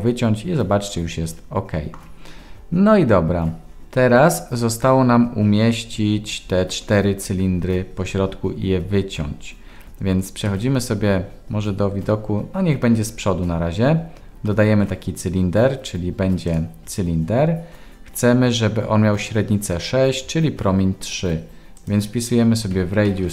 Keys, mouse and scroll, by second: 10.5 KP_1, 14.6 shift+a, 21.7-23.3 drag, 23.2 m.